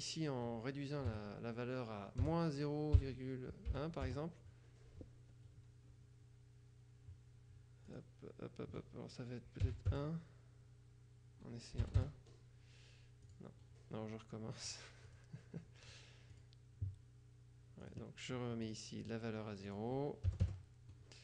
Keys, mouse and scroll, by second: 1.2 KP_Subtract, 2.3 0, 3.0 ., 3.8 KP_1, 4.1 KP_Enter, 8.0 click, 9.7 KP_1, 10.0 KP_Add, 12.0 Return, 12.0 BackSpace, 13.4 click, 14.8-15.8 drag, 16.0-17.0 drag, 18.0 click, 18.8-20.4 drag, 20.4 KP_0, 20.6 KP_Enter.